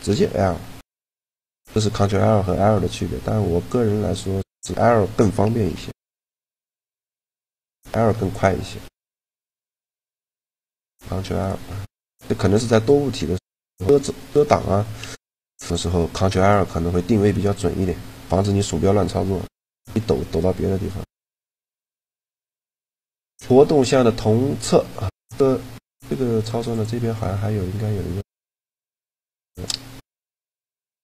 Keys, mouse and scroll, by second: 2.1-3.3 middle drag, 3.3 a, 5.5 l, 6.7 l, 7.8 l, 8.9 a, 9.7-11.0 middle drag, 11.2-12.7 middle drag, 12.0 a, 16.1-18.0 right drag, 18.9 middle click, 19.8 a, 21.3-23.2 drag, 25.2-27.0 middle drag, 26.4-28.2 drag, 28.7-30.2 right drag, 29.2-30.9 drag.